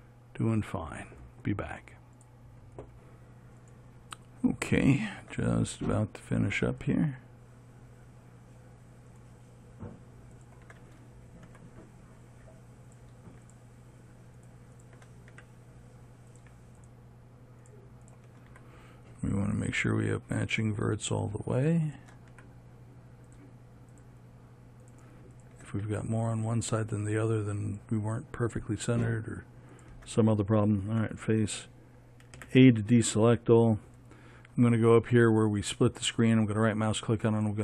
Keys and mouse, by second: 12.0 f, 15.8 f, 19.0 f, 22.8 f, 26.3 f, 31.4 f, 32.8 a, 36.3-37.6 drag.